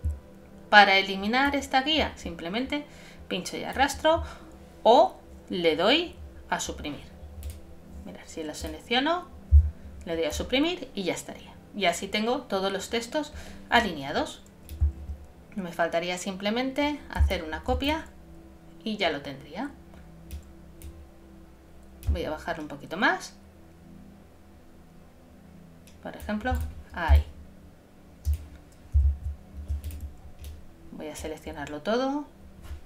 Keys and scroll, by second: 27.1 shift+space, 29.1 super+z.